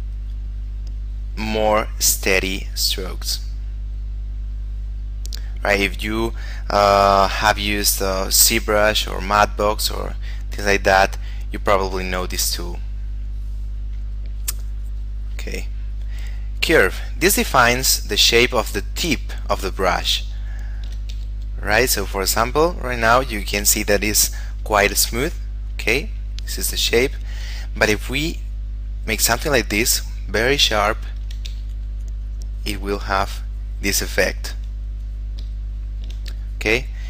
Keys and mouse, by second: 7.7 shift+middle click, 9.4 click, 11.8 click, 15.1 click, 20.5 shift+middle click, 21.3 f, 22.1 click, 28.5 click, 31.1 shift+middle click, 31.7 f, 32.5 click, 35.9 shift+middle click, 36.6 click.